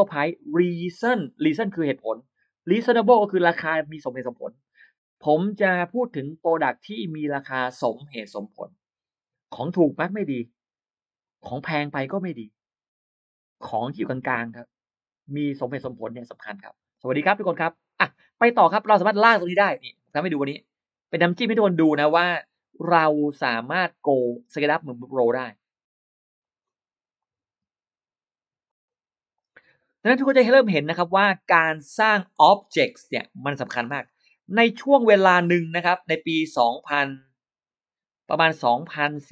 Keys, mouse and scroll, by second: 17.4 shift+right click, 17.6 shift+right click, 19.3 click, 20.7 click, 21.8 click, 23.6 click, 24.4 click, 26.2 click, 27.0 click, 28.5 click, 29.2 click, 31.3 click, 32.8 click, 33.7 click, 35.0 click, 35.9 click, 38.4 click.